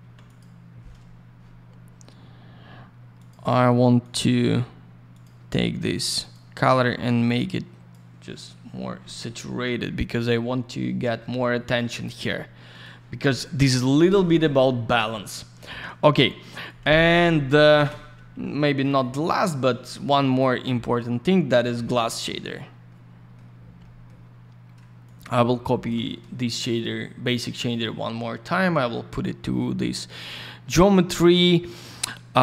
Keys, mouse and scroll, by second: 0.2 click, 3.2 click, 3.3 click, 4.0 click, 4.1 click, 5.1 click, 5.2 click, 6.2 click, 6.3 click, 7.2 click, 12.7 click, 12.8 click, 16.6 click, 16.8 click, 17.0 F3, 17.7 ctrl+shift+space, 18.3 й, 18.8 click, 20.3 ctrl+click, 21.6 middle click, 22.4-22.7 scroll down 1, 22.9 middle click, 23.8 middle click, 24.3-24.8 scroll up 1, 25.0 shift+click, 27.6 click, 27.8 click.